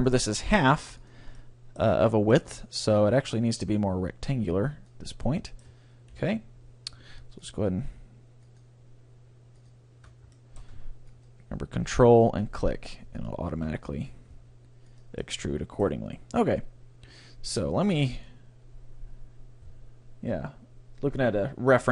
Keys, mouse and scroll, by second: 1.2-2.9 drag, 1.4-4.1 middle drag, 3.2-5.0 drag, 5.2 middle click, 6.1 KP_3, 7.4-12.8 drag, 10.4 middle click, 10.8-12.2 right drag, 13.2-14.9 drag, 14.4 g, 15.1-16.6 drag, 16.6 middle click.